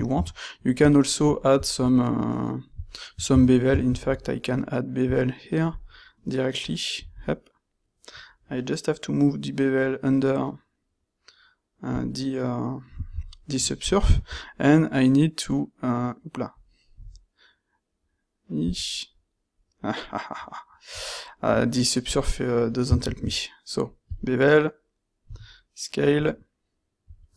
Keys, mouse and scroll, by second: 4.0 ctrl+shift+q, 23.1 ctrl+shift+q.